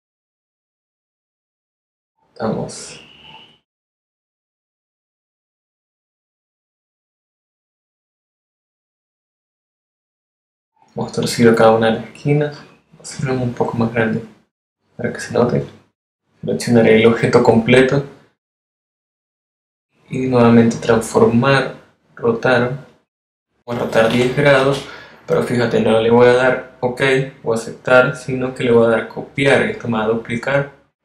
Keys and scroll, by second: 11.2 v, 24.1 0.